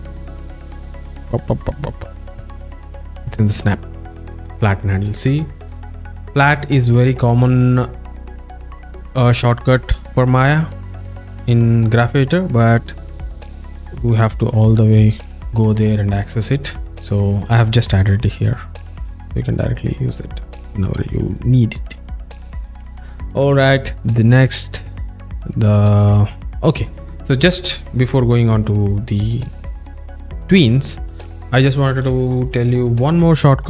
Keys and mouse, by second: 7.0 click, 12.3 drag, 18.3 click, 19.1 z, 20.5 z, 22.6 alt+shift+middle click, 25.1-26.8 alt+middle drag, 31.1-32.0 alt+shift+middle drag.